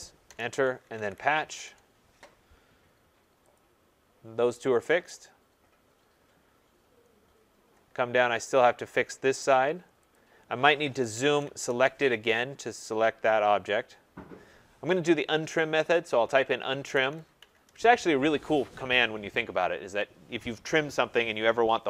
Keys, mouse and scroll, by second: 0.2 Return, 0.5-1.8 typing, 3.5 click, 4.5-6.2 scroll, 6.2-6.6 scroll, 6.2-6.9 typing, 7.1-10.0 scroll, 10.1 click, 11.1 scroll, 11.1 z, 11.2 Return, 11.4 s, 11.5 Return, 12.3-12.9 scroll, 12.9-14.4 scroll, 13.3 z, 14.5 Return, 15.6-19.1 typing, 17.6 middle click.